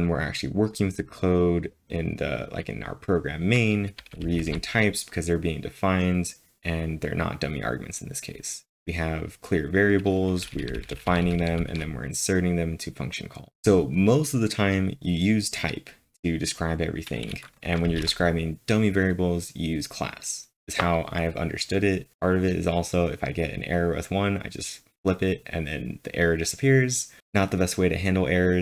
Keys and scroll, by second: 3.8-5.0 typing, 10.2-12.1 typing, 13.3-14.1 typing, 17.8 typing.